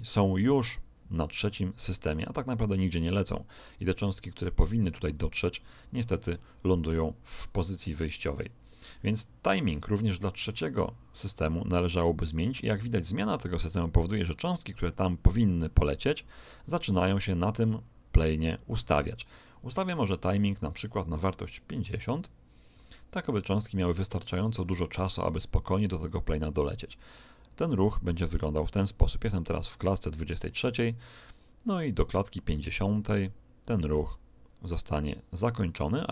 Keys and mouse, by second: 10.8 click, 26.9-28.7 middle drag, 30.3 click.